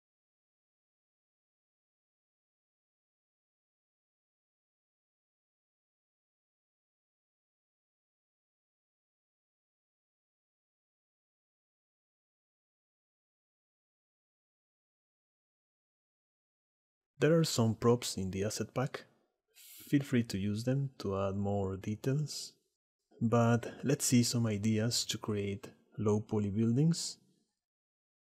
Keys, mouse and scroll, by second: 3.6 click, 4.2 click, 4.9-6.9 shift+middle drag, 8.3 click, 9.4 click, 10.1 middle click, 10.5 middle click, 10.7 click, 10.9 middle click, 11.4-13.6 drag, 16.2 shift+middle click, 16.5 click, 17.6 click, 17.9 s, 19.6 s, 20.1 shift+middle click, 20.4 shift+middle click, 21.6 s, 21.9 click, 22.2 s, 22.5 shift+middle click, 22.9 middle click, 23.6 s, 24.2 s, 24.6 shift+middle click, 25.8 s, 27.7 alt+h.